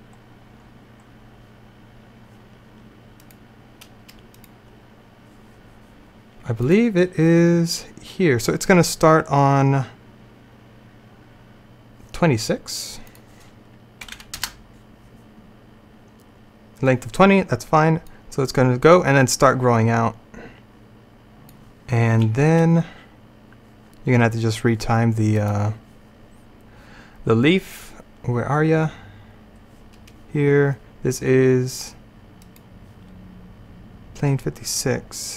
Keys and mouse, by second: 3.3-8.5 drag, 13.2-17.2 drag, 18.1-20.1 drag, 25.4-27.9 middle drag.